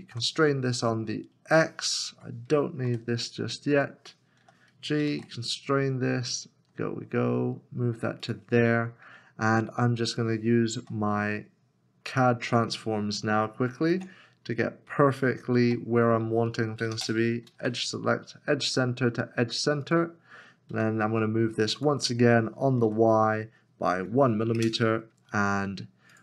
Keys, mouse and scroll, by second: 0.0 shift+z, 2.3 Escape, 2.9 w, 4.9 g, 5.1 shift+z, 8.9 scroll up 1, 10.8 g, 13.9 alt+c, 16.7 g, 16.9 space, 17.4 shift+e, 20.7 g, 22.9 y, 24.0 1, 24.6 Return, 25.2 scroll down 1.